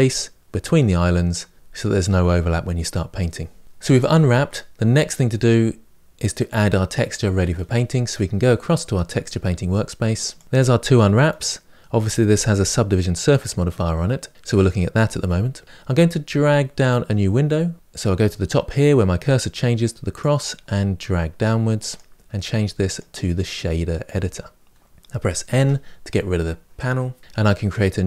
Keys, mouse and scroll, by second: 10.2 click, 21.7-25.4 drag, 25.4 n.